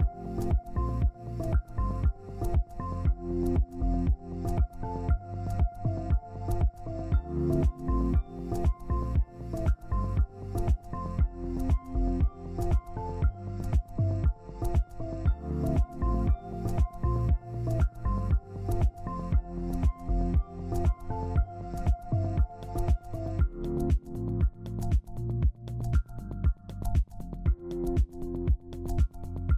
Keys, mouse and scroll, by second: 0.3 scroll down 1, 1.2 typing, 2.5 ctrl+space, 3.5 double click, 12.7 z, 14.1 ctrl+space, 21.0 shift+click, 22.1 shift+click, 28.3 Escape.